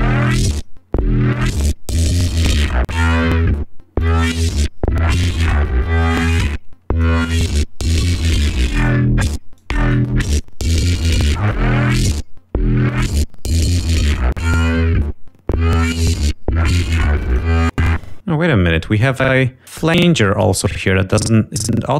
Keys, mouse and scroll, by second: 0.0 click, 2.1 click, 3.7 click, 5.5-6.7 drag, 7.6 click, 9.0 click, 9.8 click, 10.4 click, 12.3-14.1 drag, 16.3 click, 17.3 scroll up 2, 17.3 space, 20.7 click.